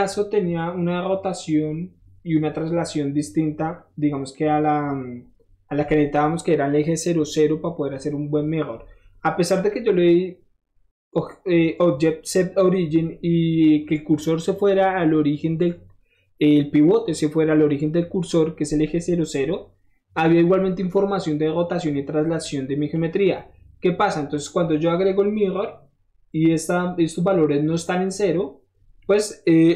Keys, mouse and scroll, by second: 3.3 middle click, 3.6 middle click, 3.7-4.3 middle drag, 9.6 click, 22.3 middle click, 22.4-22.9 middle drag, 23.1 middle click, 23.2 middle click, 23.3-24.0 middle drag, 24.9 click, 28.9 middle click, 29.0-29.5 middle drag.